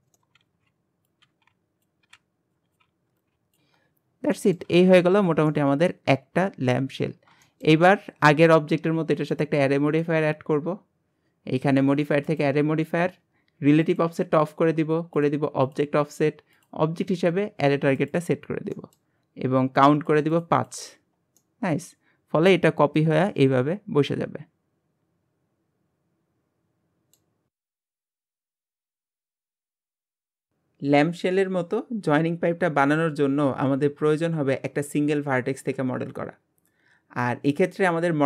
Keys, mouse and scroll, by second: 0.0 shift+middle click, 0.3 scroll up 2, 0.4 ctrl+r, 1.1 scroll up 1, 1.2 ctrl+r, 1.9 scroll down 5, 2.1 ctrl+r, 2.2 g, 2.7 ctrl+r, 2.8 g, 3.2 ctrl+r, 3.3 g, 3.6 Tab, 3.8-4.4 scroll down 1, 4.4-4.7 middle drag, 4.7 alt+z, 4.9-5.5 scroll down 5, 5.5-7.1 middle drag, 7.1-7.4 scroll down 2, 7.4-9.3 shift+middle drag, 9.3-9.9 drag, 12.4-12.9 drag, 13.8 click, 14.4-15.3 drag, 15.6-18.8 drag, 18.8-20.1 middle drag, 20.1-21.4 drag, 21.4-24.4 middle drag, 34.8-36.0 shift+middle drag, 36.0-36.4 scroll up 4, 37.2 middle click, 38.1-38.2 scroll up 1.